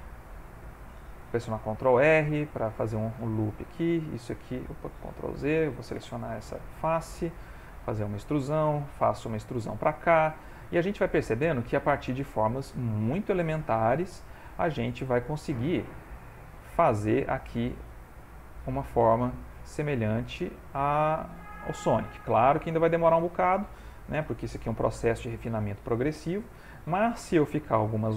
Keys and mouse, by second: 1.3 ctrl+r, 3.4 click, 3.8 e, 5.0 ctrl+z, 5.9 3, 6.1 click, 6.8 e, 7.9 shift+middle click, 8.6 click, 8.9 e, 10.0 middle click, 10.8 middle click, 11.2 middle click, 11.9 ctrl+middle click, 12.4 shift+middle click, 12.9 ctrl+middle click, 13.3 shift+middle click, 14.3 click, 14.6 e, 15.7 e, 17.3 s, 18.7 e, 19.9 middle click, 20.7 ctrl+middle click, 21.2 shift+middle click, 21.8 ctrl+middle click, 22.8 shift+middle click, 23.6 middle click, 24.7 2, 25.3 click, 26.5 g.